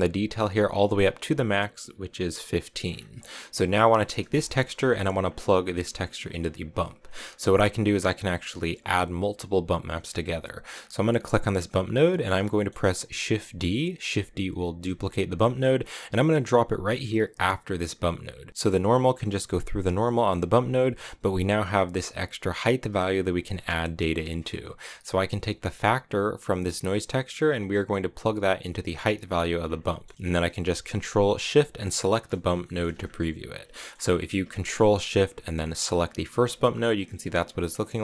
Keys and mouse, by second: 0.8-2.4 drag, 3.1 middle click, 4.3 middle click, 5.1 click, 6.6 click, 10.7-12.1 drag, 12.4 click, 14.7 shift+d, 17.2 click, 17.7 click, 18.4 click, 20.1 click, 20.9 middle click, 21.9-23.4 drag, 24.5 click, 25.6 click, 26.8-29.1 drag, 29.8 middle click, 31.7 ctrl+shift+click, 32.5 shift+click, 33.7 shift+click, 35.8 ctrl+shift+click, 37.6 middle click.